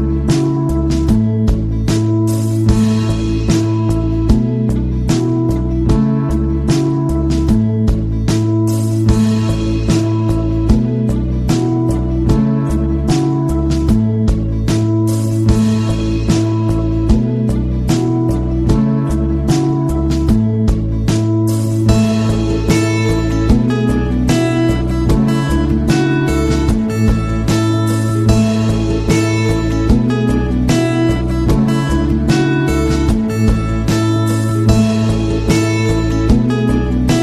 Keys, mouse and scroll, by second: 0.5 click, 2.8 click, 5.8 click, 11.1 click, 16.9 click, 17.2 click, 17.9 scroll up 1, 18.4-18.8 scroll up 1, 20.5 scroll up 1, 23.1 click, 24.8 click, 29.9 click, 31.3 click.